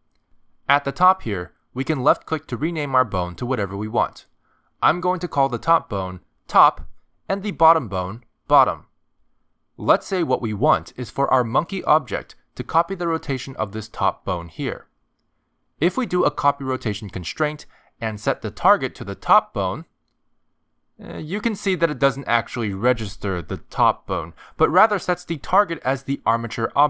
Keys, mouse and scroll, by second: 1.5 click, 7.2 click, 8.7 click, 9.9 t, 13.4 click, 15.9 Tab, 17.1 click, 19.1 click, 20.2 click, 22.2 click, 26.5 r.